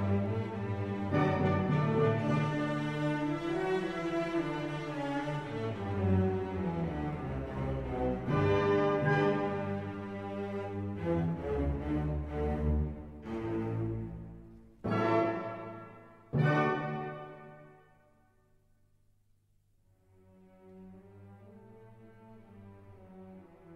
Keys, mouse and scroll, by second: 2.5 click, 5.3 click, 6.6 click, 7.9 click, 10.9 click, 14.0 click, 14.9 click, 15.6 1, 16.2 0, 17.1 click, 17.8 1, 18.3 0, 19.3-19.6 scroll down 2, 21.4 click, 22.2 click, 23.5-23.7 drag.